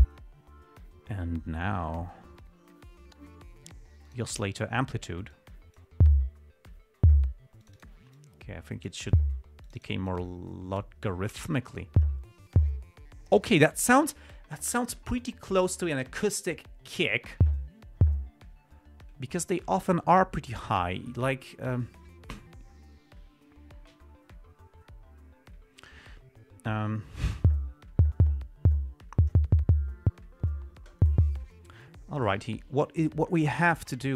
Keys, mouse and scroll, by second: 4.4 click, 5.7 click, 7.9 click, 8.5-9.4 drag, 10.0 click, 10.4-11.3 drag, 11.8-12.3 drag.